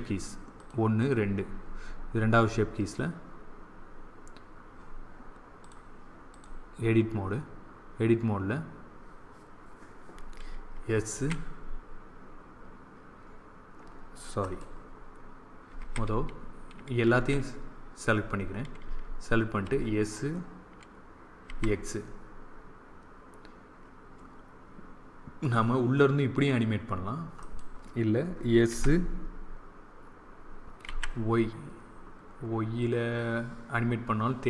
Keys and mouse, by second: 5.5-7.5 drag, 11.0 s, 15.7 a, 17.1 a, 19.5 s, 28.6 s.